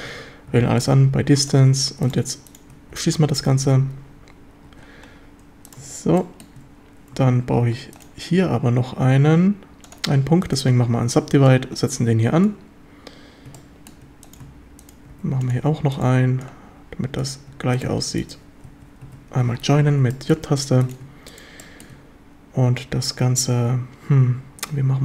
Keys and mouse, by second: 0.0-1.6 typing, 2.9 f, 3.1 a, 3.5 z, 4.7 z, 6.2 shift+middle drag, 9.2 w, 11.5 click, 13.6-13.9 shift+drag, 15.1 w, 16.5 click, 19.1 j, 19.1 a, 20.1 shift+middle drag, 21.6 shift+middle click.